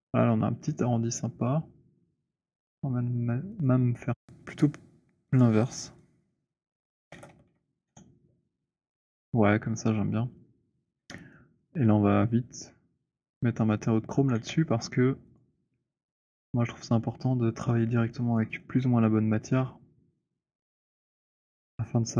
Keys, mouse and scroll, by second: 3.8 click, 5.2 click, 6.7 click, 6.8-7.9 typing, 10.8 w, 12.5 right click, 13.3 click, 14.0 w, 15.3 click, 18.3 middle click, 21.1 middle click.